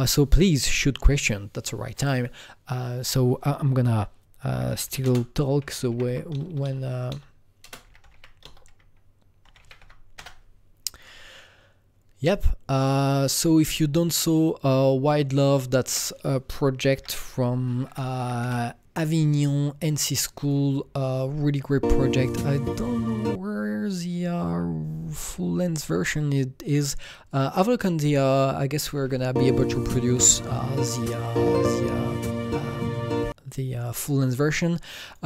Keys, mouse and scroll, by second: 2.1 click, 4.5-8.4 typing, 9.9-10.7 typing, 15.4 Return, 15.4 click, 15.4-18.2 typing, 17.0 click, 18.2 Down, 18.4 Return, 20.4 click, 23.2 Return, 23.2 click, 24.6 scroll down 2, 25.6-27.3 scroll up 1, 27.3 click, 33.2 click, 33.2-33.7 scroll up 1.